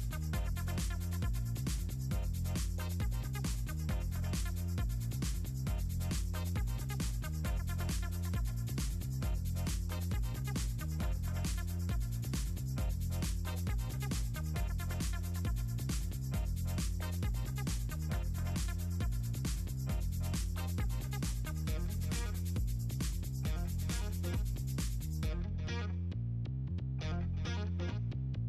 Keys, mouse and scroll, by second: 0.1 click, 0.4 click, 0.8 middle click, 1.1 ctrl+scroll down 2, 1.5 click, 1.9 click, 2.1 click, 2.3 click, 2.4 middle click, 2.7 click, 3.0 space, 3.6 middle click, 4.0 ctrl+scroll up 2, 4.6 ctrl+scroll up 2, 5.0 middle click, 5.1 click, 5.6 ctrl+click, 5.8 click, 6.2 middle click, 6.7 middle click, 7.5 click, 8.5 click, 10.1 right click, 10.8 click, 12.6 middle click, 12.8 middle click, 13.2 middle click, 13.3 click, 14.4-15.0 drag, 16.4 middle click, 16.5 middle click, 17.4 click, 17.6 click, 18.5 click, 19.3 click, 19.8 click, 20.2 click, 21.0 click, 21.8 click, 22.1 click, 24.0 click, 26.9 click, 28.0 Delete.